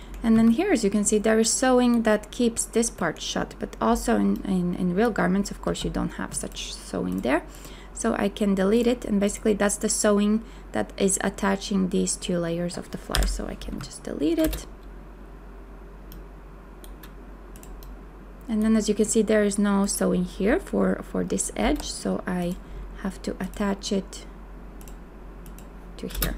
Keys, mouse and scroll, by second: 0.3 a, 5.7 b, 13.1 Delete, 13.7 a, 14.4 space, 21.6 m, 26.1 space.